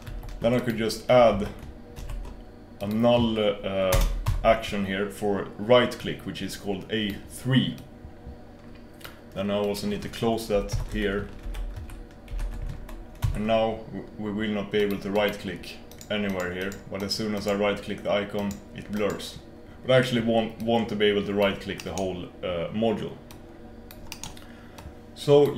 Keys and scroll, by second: 22.3 BackSpace.